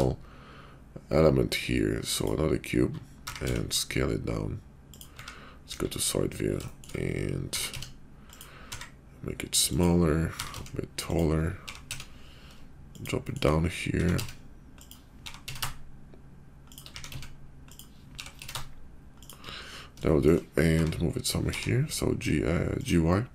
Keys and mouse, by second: 3.2 s, 5.1 `, 5.6 KP_5, 6.8 shift+middle click, 7.4 s, 8.6 s, 10.3 s, 11.5 g, 13.2 shift+middle click, 13.9 s, 15.2 g, 16.9 s, 18.0 g, 20.1 shift+click, 20.7 g, 23.1-23.3 middle drag.